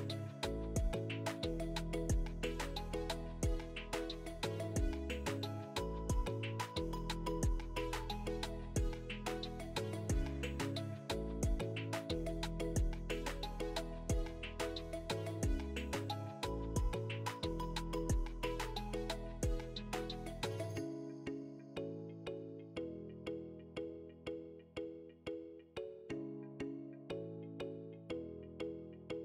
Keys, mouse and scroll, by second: 0.2 g, 1.7 click, 2.2 g, 2.9 click, 3.8 click, 3.9-7.0 typing, 4.5 click, 5.3 click, 6.2 click, 6.9 click, 8.1 click, 8.2 g, 9.0 click, 9.1 g, 9.9 click, 10.0 g, 10.8 click, 11.9 e, 13.2 click, 13.9 g, 15.1 click, 15.2 g, 17.4 click, 17.6 g, 18.3 click, 19.1 e, 20.1 click, 20.9 g, 22.5 click, 23.2 e, 24.9 click, 25.5 g.